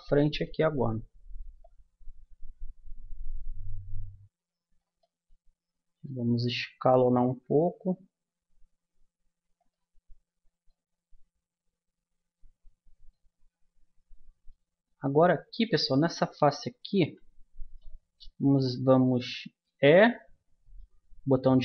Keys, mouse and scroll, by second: 1.6-3.6 drag, 5.0 middle click, 7.2 s, 11.0-12.5 middle drag, 13.4-17.0 middle drag, 17.0 a, 17.6-19.3 right drag, 19.7 e.